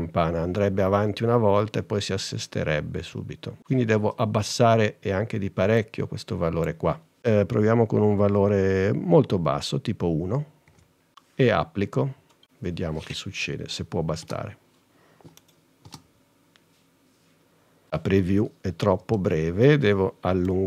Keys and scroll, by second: 10.1 |, 14.3 space, 16.0 space, 20.0 space.